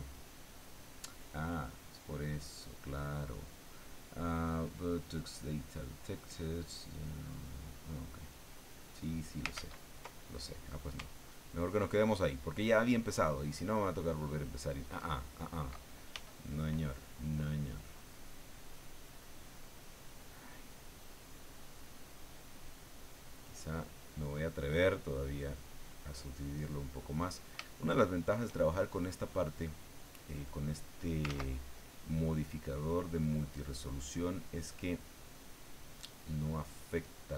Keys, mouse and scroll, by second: 1.5 click, 8.1 click, 9.5 ctrl+z, 11.0-15.1 ctrl+drag, 16.1 f, 16.6 click, 17.3-21.9 drag, 22.0-23.9 middle drag, 23.9-25.5 scroll up 1, 25.5 click, 26.6 middle click, 27.7 shift+middle click, 28.7 shift+middle click, 30.1-31.2 drag, 31.3 ctrl+z, 31.8-34.1 ctrl+drag, 34.1 middle click, 35.2-37.3 drag.